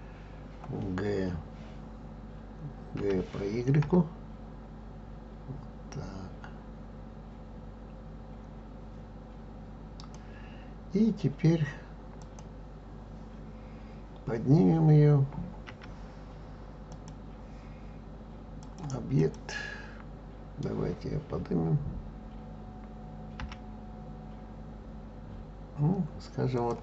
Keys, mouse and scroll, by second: 0.4-3.0 scroll down 1, 3.0 g, 12.2 click, 15.6 g, 16.9 click, 18.6-21.6 drag, 23.4 g.